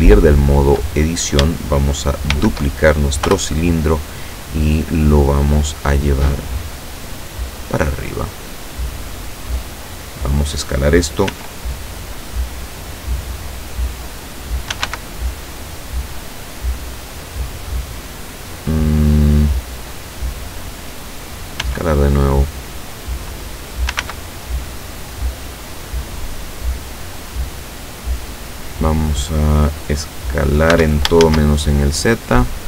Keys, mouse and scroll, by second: 2.4 shift+d, 3.3 Return, 4.9-5.4 scroll down 2, 6.4-10.4 drag, 11.4 s, 13.1 click, 14.8 s, 14.9 x, 17.3 click, 17.8-18.4 scroll up 2, 19.3 scroll down 2, 21.6 s, 22.9 click, 24.0 s, 28.4 click, 30.8 s, 31.2 shift+z.